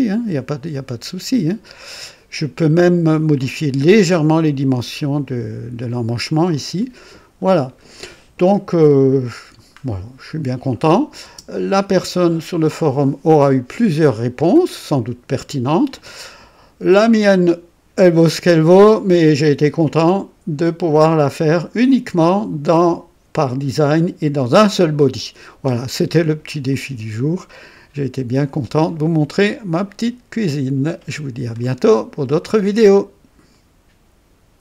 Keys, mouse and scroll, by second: 4.7 click, 6.4-7.4 drag, 7.7 scroll up 1, 8.4 right click, 9.7 scroll down 1, 10.8 click, 11.2 space, 12.0 click, 12.9-16.2 drag, 19.8 click, 20.9-21.7 drag, 26.6-31.7 drag, 33.5 right click.